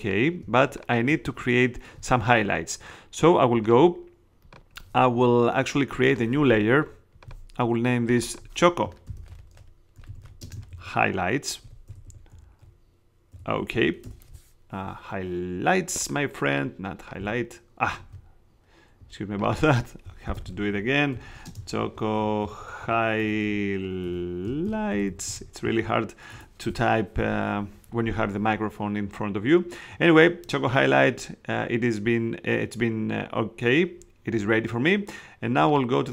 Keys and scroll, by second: 8.8-14.2 typing, 17.1 s, 17.8 super+s, 17.9 super+z, 20.1-25.8 typing, 26.3 Return.